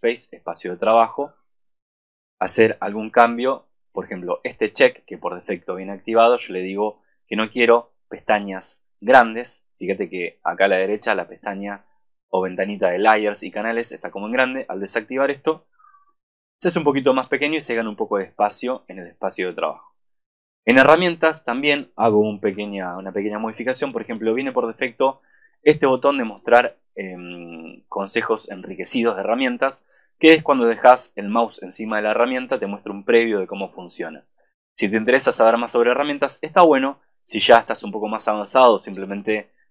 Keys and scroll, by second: 22.4 super+=.